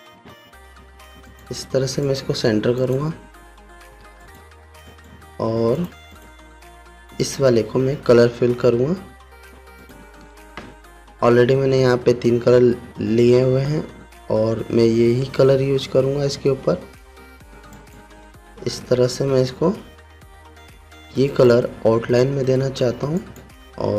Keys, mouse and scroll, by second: 0.7 ctrl+g, 1.8 click, 5.4 right click, 6.3 click, 10.3 click, 18.3 click, 19.7 v, 21.9 click.